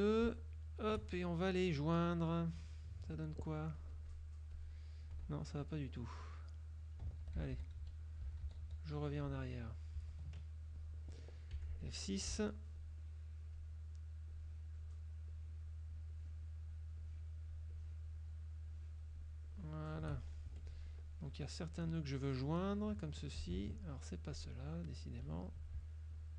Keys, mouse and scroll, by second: 2.2 click, 3.9 click, 4.7 click, 5.4 ctrl+z, 6.1 ctrl+click, 7.3 ctrl+z, 10.1 ctrl+z, 11.7 F6, 12.9-13.9 shift+drag, 14.4-15.1 shift+drag, 15.4 shift+click, 16.2-16.8 shift+drag, 17.1 shift+click, 17.8-18.4 shift+drag, 18.7-19.3 shift+drag, 19.6-20.3 shift+drag, 20.6 shift+F2, 21.1 shift+click, 22.7 click, 24.5 click, 25.3 shift+click, 26.2 shift+click.